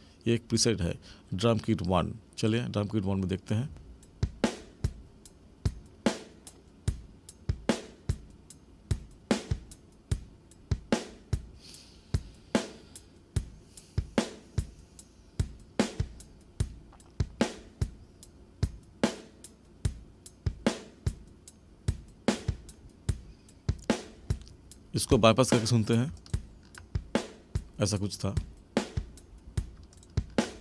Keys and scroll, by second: 3.7 space.